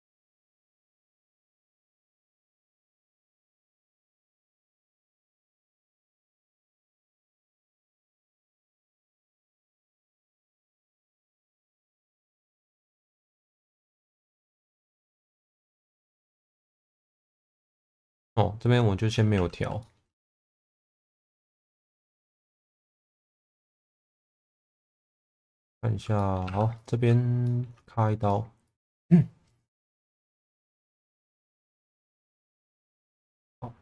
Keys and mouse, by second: 0.3 middle click, 1.0 shift+middle click, 2.3 g, 2.4 b, 5.8 g, 5.9 b, 7.3 middle click, 9.3 click, 10.4 click, 11.0 click, 11.9 middle click, 12.8 click, 13.3 middle click, 14.3 middle click, 15.3 2, 15.7 click, 16.3 shift+click, 17.1 e, 17.4 z, 18.0 click, 19.3 1, 19.8 middle click, 22.0 g, 22.1 b, 22.4 click, 22.9 click, 23.4-24.5 middle drag, 25.1 middle click, 26.2 middle click, 26.5 2, 26.7 click, 27.4 middle click, 28.7 shift+click, 29.5 right click, 29.9 1, 30.4 click, 31.6 shift+click, 32.7 g, 32.8 b.